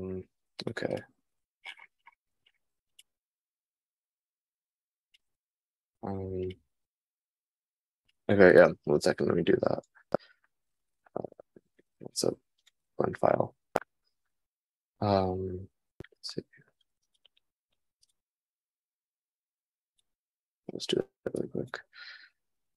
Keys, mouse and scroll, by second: 11.2 super+s, 16.6 super+s.